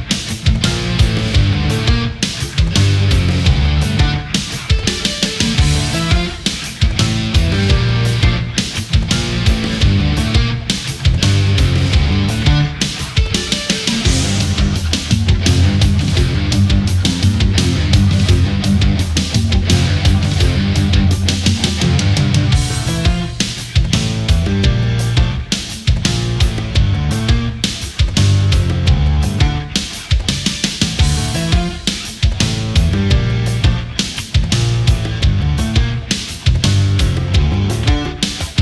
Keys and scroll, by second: 17.2 ctrl+z, 25.7 ctrl+z.